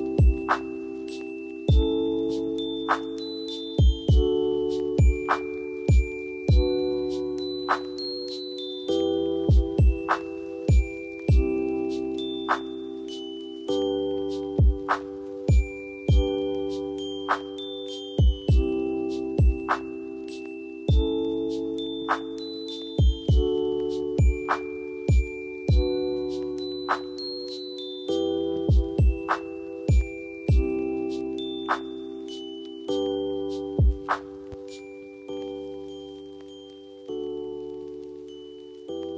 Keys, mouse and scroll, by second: 5.3 scroll down 1, 5.6 F2, 5.9-6.5 drag, 13.2 shift+Page_Up, 14.3 click, 15.2 shift+Page_Up, 16.3-20.5 drag, 17.4-19.3 drag, 20.8-22.4 drag, 23.3-24.0 click, 24.8 b, 28.3-33.0 drag, 36.5 F2, 37.2-38.2 click.